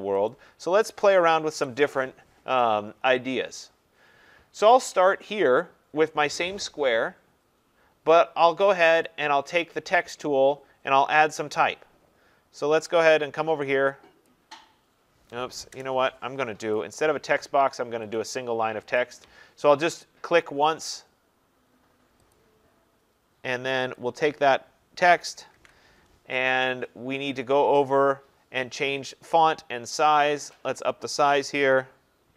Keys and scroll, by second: 15.7 BackSpace, 25.5 ctrl+a.